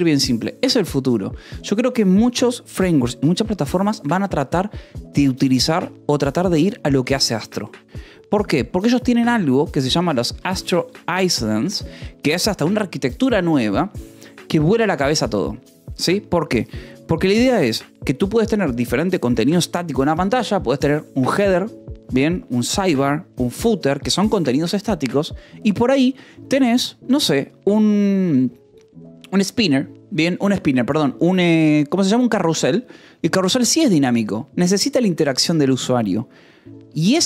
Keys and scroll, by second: 1.2 :, 1.3 space, 9.6-11.9 typing.